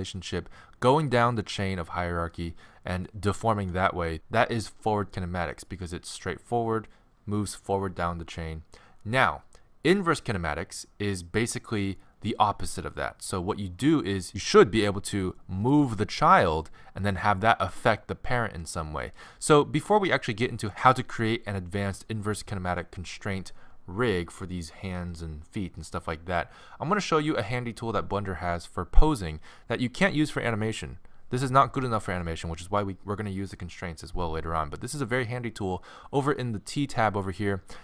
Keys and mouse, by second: 1.1-4.1 right drag, 1.8 alt+r, 3.6 alt+r, 15.7-19.2 drag, 19.2-20.7 right drag.